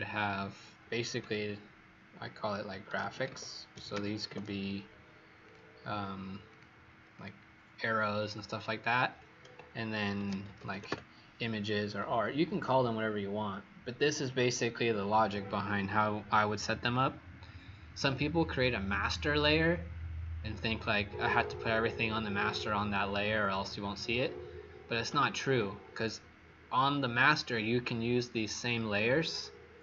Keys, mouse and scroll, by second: 2.5-4.7 typing, 5.4 click, 7.1 click, 10.0-11.3 typing, 15.1 click.